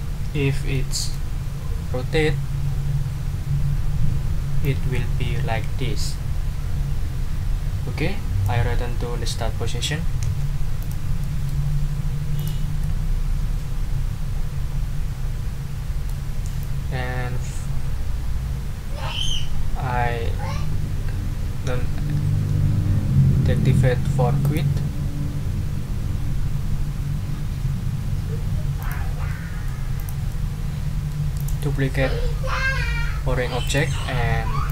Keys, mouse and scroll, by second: 0.1 ctrl+scroll down 2, 0.7 ctrl+click, 0.9 middle click, 4.6-8.6 drag, 10.2 ctrl+z, 10.8 ctrl+click, 11.2 ctrl+middle click, 11.8 ctrl+scroll down 2, 12.3 ctrl+click, 12.8-16.2 ctrl+middle drag, 24.4 click, 28.8 click, 29.3 middle click, 30.0 click, 30.3-31.3 middle drag, 31.4 click, 33.6 right click, 34.6 click.